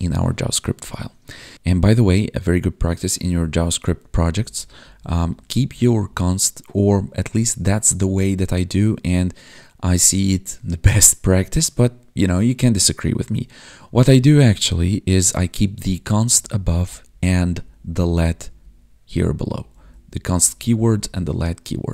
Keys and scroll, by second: 3.9 ctrl+Down, 4.7 ctrl+Up, 5.6 Up, 7.9 ctrl+Up, 15.0 Down, 15.6 Up, 16.0 Down, 16.3 Up, 16.8 Down, 18.3 Up, 19.0 Down, 19.4 Up, 20.7 Down.